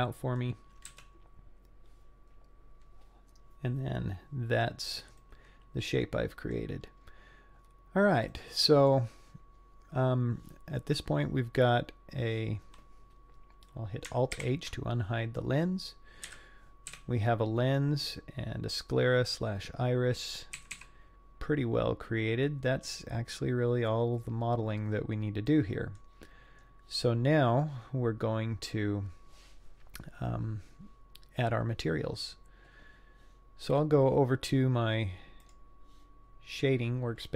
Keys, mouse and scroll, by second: 0.9 z, 5.2-6.5 middle drag, 6.8-7.6 scroll down 4, 7.6 scroll up 3, 8.3 middle click, 9.4-9.9 scroll down 2, 9.9-10.6 scroll up 2, 14.4 alt+h, 15.3 scroll down 1, 15.4 middle click, 16.3 KP_3, 16.9 z, 17.8-18.5 scroll up 2, 20.6 a, 20.8 a, 21.8-23.9 scroll down 3, 25.5 middle click, 26.6 scroll up 1, 27.2-27.7 scroll down 1, 27.7 scroll up 1.